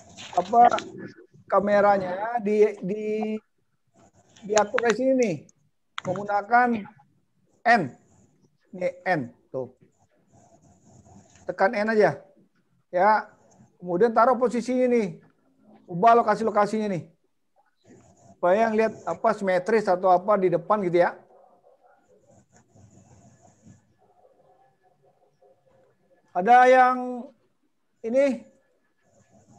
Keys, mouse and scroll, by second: 8.4-12.0 typing, 28.8 click.